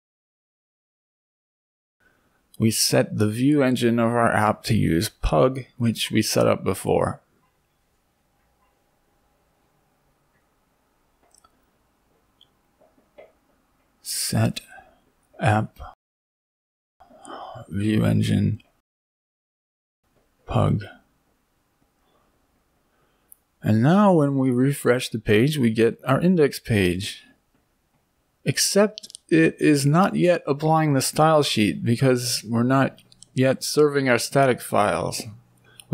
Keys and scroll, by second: 1.8 ctrl+c, 6.9 ctrl+v, 10.4 Up, 19.8 BackSpace, 20.2 Right.